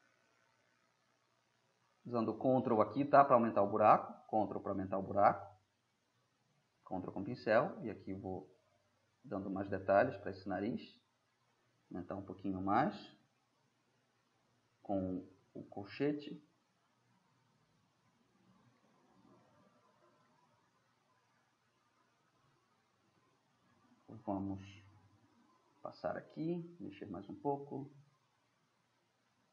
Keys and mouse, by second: 9.7-10.2 drag, 10.2-10.8 middle drag, 10.8-12.0 drag, 12.0 ], 15.0 click, 15.1 middle drag, 16.6-18.7 middle drag, 18.7-19.2 drag, 19.2-19.9 middle drag, 21.5-22.5 middle drag, 22.9 ], 26.9-27.2 drag, 27.2-29.5 middle drag.